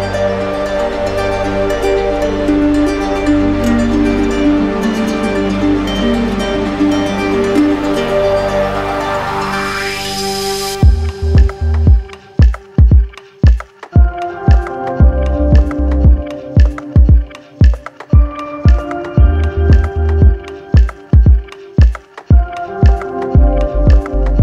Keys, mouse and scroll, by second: 1.0-4.3 drag, 4.8-5.8 scroll up 2, 5.8 scroll, 7.5-7.9 scroll, 7.9 middle click, 10.8-11.9 drag, 13.8-15.2 drag, 14.3 ctrl+z, 15.4-16.5 alt+drag.